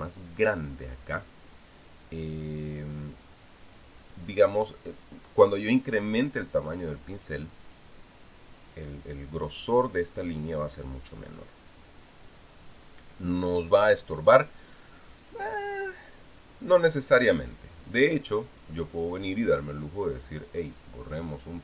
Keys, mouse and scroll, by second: 20.2 click.